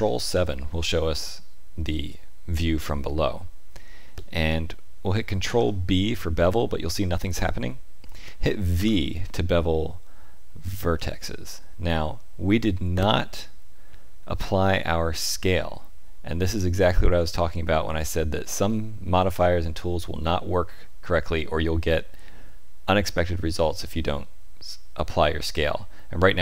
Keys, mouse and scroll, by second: 1.1 shift+middle click, 5.4 ctrl+b.